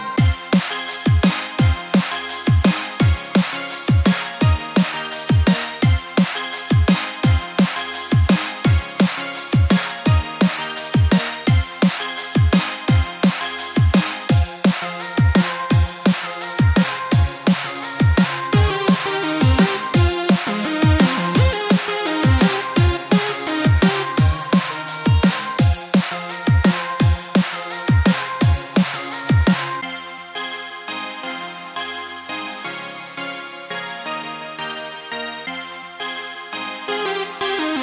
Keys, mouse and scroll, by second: 1.5 r, 3.1 scroll up 1, 3.7-4.2 scroll up 2, 4.2 Tab, 4.3 scroll down 2, 4.8 click, 5.1 click, 5.4 scroll up 2, 5.5 shift+middle click, 6.2 click, 6.5 x, 7.0 click, 7.3 x, 8.0 click, 8.4 a, 9.1 s, 9.4 g, 11.8 middle click, 12.3 Tab, 12.4 right click, 13.4 click, 13.7 click, 15.3 click, 15.6 click, 17.3 KP_1, 17.9-19.4 click, 18.0 click, 20.3 click, 21.6 click, 21.9 click, 22.2 x, 22.7 click, 23.2 Tab, 23.5 shift+z, 23.7-24.1 scroll up 6, 24.8 shift+middle click, 25.0 shift+middle click, 25.0 shift+scroll up 1, 25.1 ctrl+z, 25.1 c, 30.1-30.5 scroll down 6, 30.7 shift+middle click, 31.4 alt+shift+click, 31.6-32.0 scroll down 2, 32.3 c, 33.5-33.9 scroll up 5, 34.4 shift+middle click, 34.6 shift+middle click, 34.8 c, 35.9 x, 36.0-36.4 scroll down 5, 36.4 shift+z, 36.6 Tab, 36.8 right click, 37.6-37.8 scroll up 3.